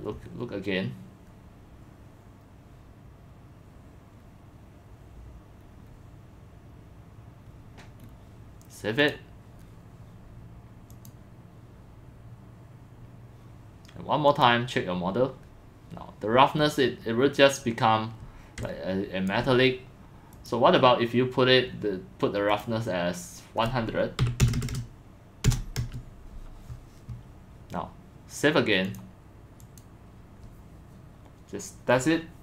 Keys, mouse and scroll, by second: 3.7 middle click, 3.8-4.3 scroll down 2, 4.4 scroll, 5.6 middle click, 5.8 click, 7.6 click, 8.0 middle click, 8.0-8.4 scroll down 4, 9.1 click, 10.9 click, 14.3 click, 16.6 scroll, 16.7 scroll up 2, 16.8 scroll down 2, 17.0 click, 17.0 scroll, 18.6 click, 19.3 alt+click, 22.5 click, 23.9-26.1 typing, 27.6 click, 28.9 click, 29.6 click, 31.7 click.